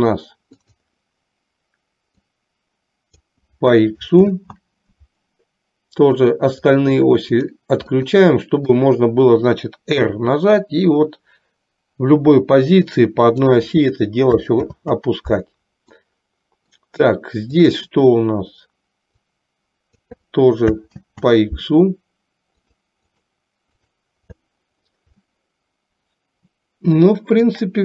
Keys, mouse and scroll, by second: 0.7 click, 2.4-3.4 drag, 4.6 ctrl+z, 6.2 click, 8.2-8.7 middle drag, 10.2 r, 14.8 ctrl+z, 16.2-16.8 middle drag, 19.3 click, 21.2 ctrl+z, 23.3 drag, 25.4-27.7 middle drag.